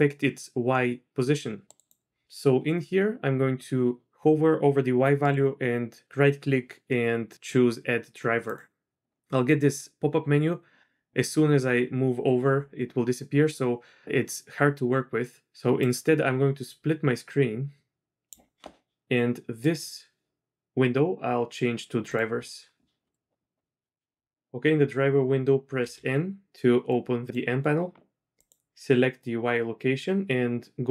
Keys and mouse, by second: 5.4-10.9 drag, 15.8-18.3 drag, 19.6-22.1 drag, 23.0 click, 25.8 n, 26.9 click, 28.4 click.